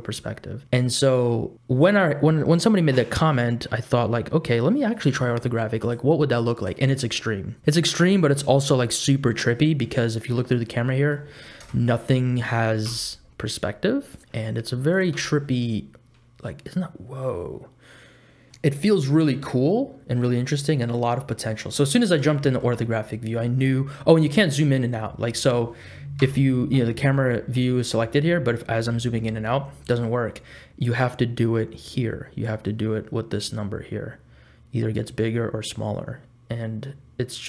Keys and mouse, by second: 5.8 click, 10.2 click, 10.7 middle click, 11.6 KP_0, 12.9 n, 14.9 click, 15.1 n, 15.2 click, 15.8-18.6 middle drag, 18.9-21.7 middle drag, 22.4 shift+middle click, 25.1 middle click, 26.2 n, 27.7 n, 32.4-35.1 drag, 35.1 middle click, 35.3-37.4 drag.